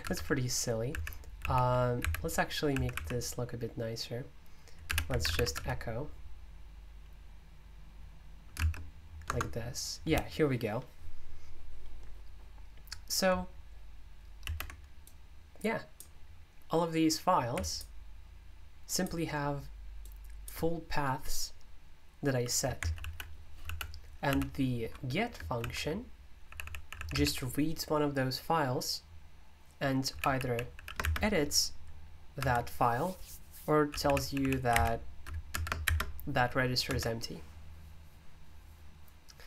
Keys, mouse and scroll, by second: 0.0 Escape, 0.1-3.4 typing, 4.6-5.8 typing, 15.0-24.3 drag, 24.3 super+u, 25.6-27.8 typing, 29.9-31.2 typing, 32.3 Escape, 33.8-35.8 typing, 35.5 Escape, 36.8 Escape.